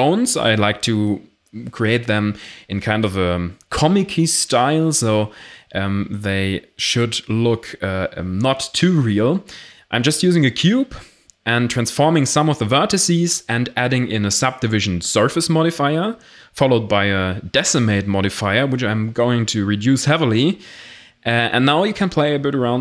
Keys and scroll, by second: 4.4 Tab, 5.1 Tab, 5.2 ctrl+r, 5.5 ctrl+r, 6.1 a, 7.3-8.9 typing, 9.3 Tab.